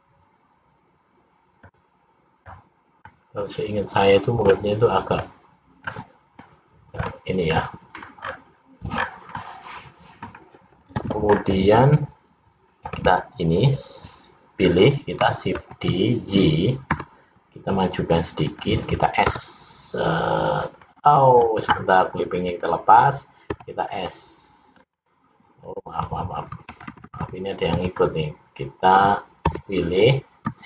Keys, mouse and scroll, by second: 1.6 click, 3.1 click, 5.3 click, 6.5 middle click, 7.8 middle click, 8.4-9.1 scroll down 4, 9.1 scroll down 3, 9.5 middle click, 11.4-12.1 scroll up 3, 13.1 l, 15.8 shift+d, 19.3 s, 22.6 click, 23.6 s, 25.8 click, 26.9 ctrl+z, 27.1 ctrl+z, 27.2 ctrl+z, 27.5 ctrl+z, 28.0 click, 29.7 l.